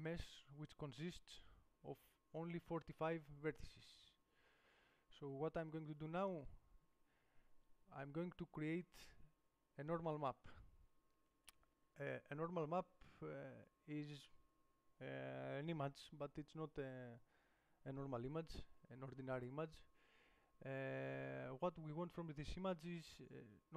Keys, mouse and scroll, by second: 4.7 Tab, 5.9-8.4 drag.